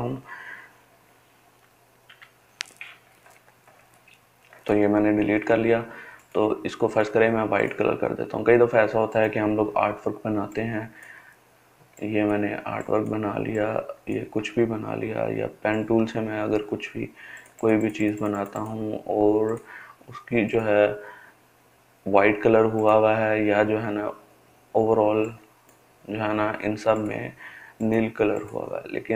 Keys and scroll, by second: 1.8 Delete.